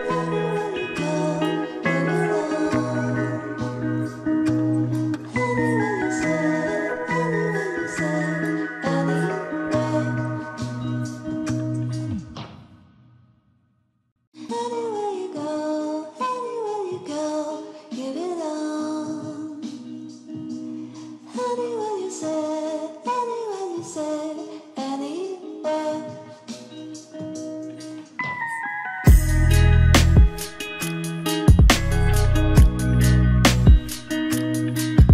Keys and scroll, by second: 1.9 ctrl+d, 8.0 ctrl+t.